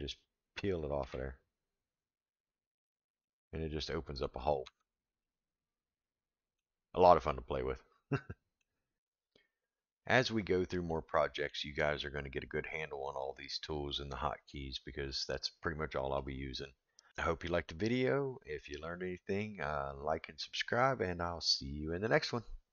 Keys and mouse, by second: 0.6 click, 1.0 v, 3.2-4.2 middle drag, 4.6 Tab, 5.2-6.6 middle drag, 8.3 middle drag, 10.9-11.5 middle drag, 15.1-16.2 middle drag, 18.7-19.4 middle drag.